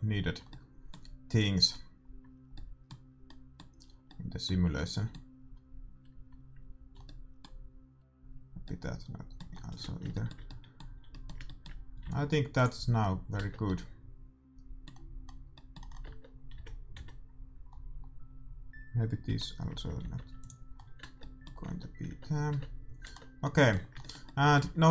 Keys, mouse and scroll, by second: 0.3 l, 1.6 l, 2.1 l, 5.2-6.8 middle drag, 6.1 l, 6.8 l, 7.0-10.1 middle drag, 8.0 l, 12.0 x, 13.3 Tab, 13.7-15.9 middle drag, 16.1 Tab, 16.5 a, 16.9 a, 19.3 l, 20.0 x, 21.0 Tab, 21.7 Tab, 22.1 Tab, 22.6 Tab, 23.0 Tab, 24.6 a.